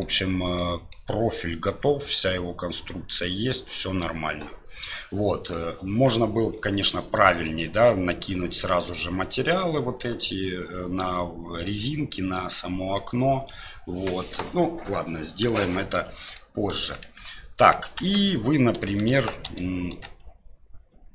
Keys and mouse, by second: 0.5-0.9 middle drag, 1.6-4.0 middle drag, 4.8-5.5 middle drag, 6.5-6.9 middle drag, 7.5-7.9 middle drag, 9.6-10.0 middle drag, 15.5-16.4 middle drag, 17.0 KP_1, 18.0 KP_3, 18.9 shift+middle drag, 19.4 Tab, 19.9 Tab.